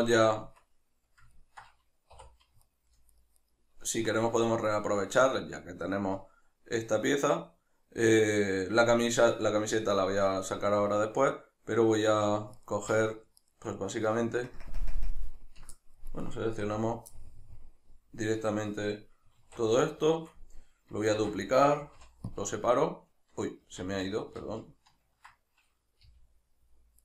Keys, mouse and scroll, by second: 0.3 Tab, 2.1 3, 2.6-3.5 alt+right drag, 12.6 shift+right click, 13.5 shift+right click, 14.5 ctrl+KP_Add, 16.3 right click, 16.7 l, 17.2-21.6 middle drag, 19.4 alt+q, 21.1 shift+d, 21.6 right click, 22.0 p.